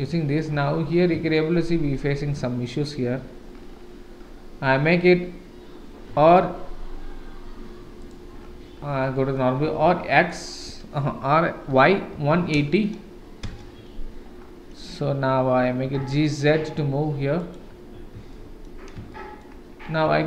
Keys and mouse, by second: 1.3-1.6 shift+middle drag, 6.1 r, 9.0-9.3 middle drag, 9.6 r, 15.8 g, 18.3-18.6 shift+middle drag, 19.1-19.4 shift+middle drag, 20.1 Tab.